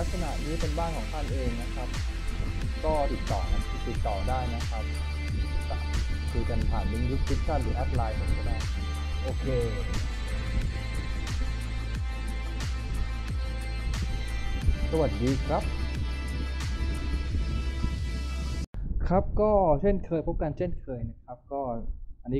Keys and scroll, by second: 0.6-2.1 typing, 9.2 s, 11.9 a, 13.8 s, 14.1 w, 14.7 a.